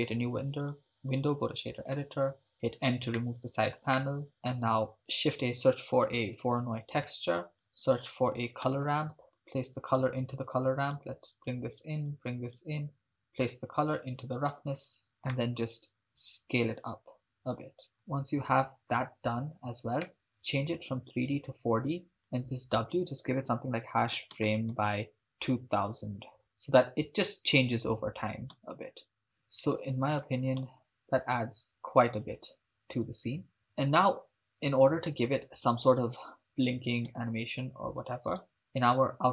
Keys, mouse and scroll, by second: 2.2 m, 2.6 n, 3.2 ctrl+middle click, 3.9 middle click, 5.1 shift+a, 7.7 shift+a, 9.2-10.0 drag, 10.7 click, 12.1-12.6 drag, 13.5-14.8 drag, 15.3-15.7 middle drag, 16.9 click, 20.1 ctrl+middle click, 20.4-21.6 drag, 22.1-27.8 drag, 26.4 0, 28.6 shift+space, 29.4 shift+space, 30.2 click, 30.7 shift+space, 33.6 shift+space, 35.4 shift+space, 36.1 shift+space, 37.2 shift+space, 38.4 right click.